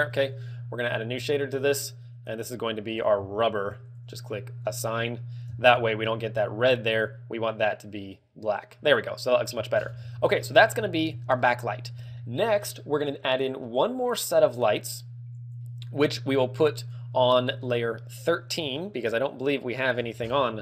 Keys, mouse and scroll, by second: 2.0 click, 2.6 click, 4.4 click, 4.9 click, 5.1 click, 6.0 Tab, 9.7-10.3 scroll down 17, 10.3 z, 10.5 shift+middle click, 10.9 middle click, 11.1 KP_1, 11.5 shift+middle click, 12.5 shift+middle click, 17.9 click, 19.1 click, 19.1 shift+middle click, 20.2-20.6 scroll down 8, 20.5 scroll up 1.